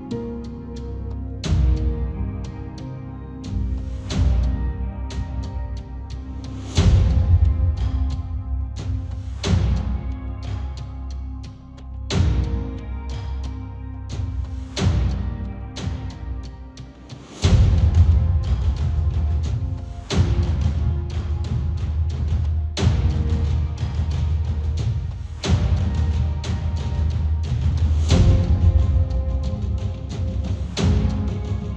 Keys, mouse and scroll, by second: 0.0 click, 0.0-7.2 middle drag, 6.7-12.6 drag, 7.6 middle click, 14.6-18.0 drag, 18.0-20.2 middle drag, 19.0 ctrl+z, 19.0-26.8 drag, 20.3-22.4 shift+middle drag, 28.8-31.7 drag, 28.9 KP_0.